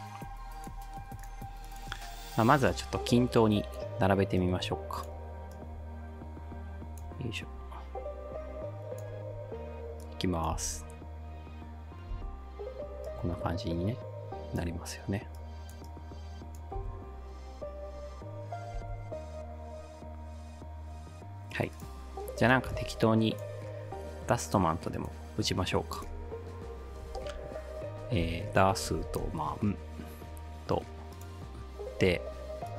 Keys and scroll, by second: 10.6 space, 12.1 space, 16.8 space, 18.8 space, 27.1-29.7 typing.